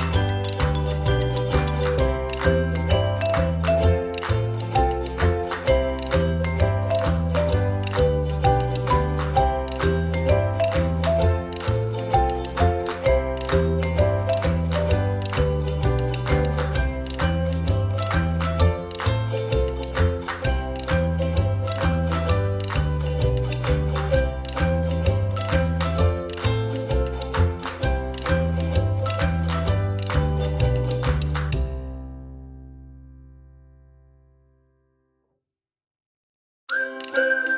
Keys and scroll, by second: 0.1 ctrl+=, 32.6 ctrl+-, 33.0 ctrl+=.